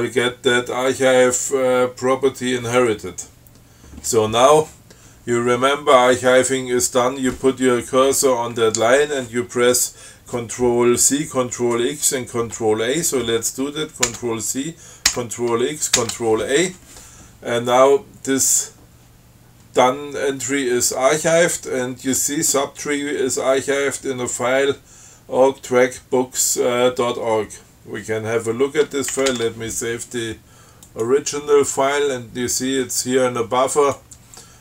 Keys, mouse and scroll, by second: 6.2 click, 14.3 ctrl+c, 15.3 ctrl+x, 16.2 ctrl+a, 29.4 ctrl+x, 29.6 ctrl+s, 31.1 click, 33.9 click.